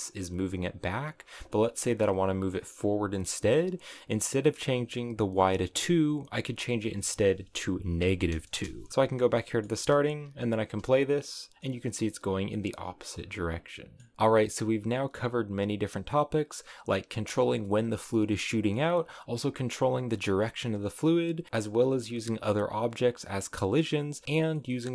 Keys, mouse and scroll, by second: 6.2-9.3 drag, 9.3 middle click, 9.6 space, 10.2 scroll up 3, 11.4-14.1 middle drag, 14.1 space, 16.0-23.4 drag, 23.4 middle click, 24.1 space, 24.4-24.9 middle drag.